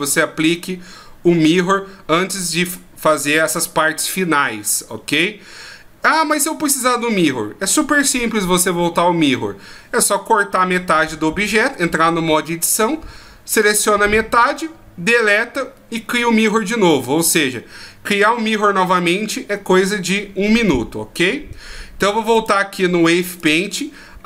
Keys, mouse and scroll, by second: 22.3 click, 23.4 click.